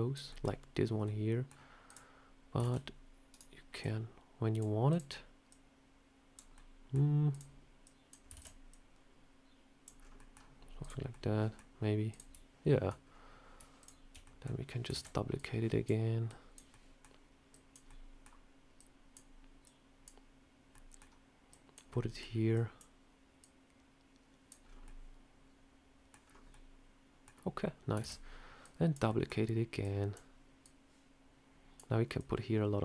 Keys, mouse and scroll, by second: 0.2 middle click, 0.9 scroll up 1, 0.9 middle click, 1.7 click, 2.5 shift+d, 3.7 click, 4.8 click, 5.4 click, 6.4 middle click, 7.2 click, 7.7 click, 8.2 shift+d, 8.6 click, 9.9 scroll down 3, 10.1 middle click, 10.7 click, 11.0 middle click, 12.0 click, 12.9 scroll up 2, 13.7 shift+click, 14.1 middle click, 14.8 shift+d, 15.2 click, 16.2 click, 16.4 shift+click, 16.6 middle click, 17.4 click, 17.8 middle click, 18.6 click, 19.5 click, 20.6 middle click, 21.4 click, 21.8 middle click, 22.4 click, 23.3 click, 24.5 scroll down 2, 24.7 middle click, 26.1 scroll down 3, 26.4 middle click, 27.4 scroll up 1, 27.9 shift+d, 28.5 click, 29.0 middle click, 29.7 click, 30.5 click, 32.1 click.